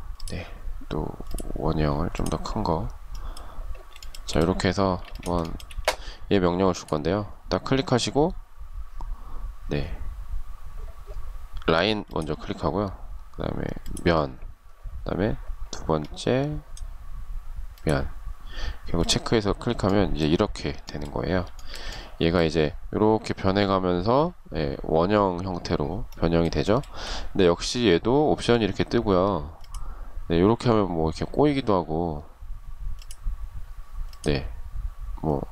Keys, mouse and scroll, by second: 3.2 shift+middle click, 4.2 space, 4.6 shift+middle click, 4.8 shift+double middle click, 20.7 shift+middle click, 25.9 shift+middle click.